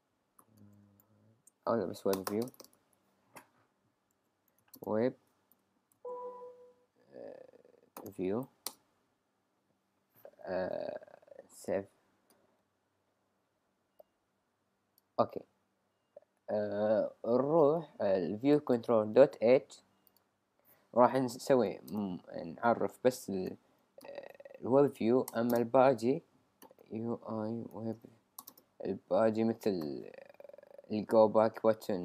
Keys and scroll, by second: 0.2-1.5 typing, 3.0-4.6 typing, 5.9 shift+v, 8.0-9.7 typing, 21.4 shift+[, 21.9 Return, 24.3 Return, 25.3 Return, 27.5-28.4 typing.